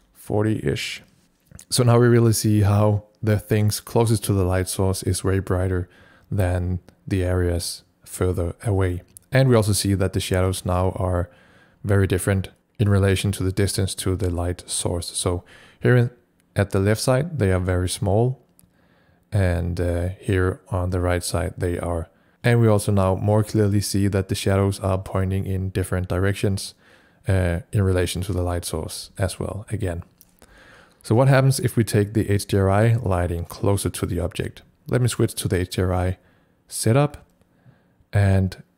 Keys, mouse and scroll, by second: 33.1 click.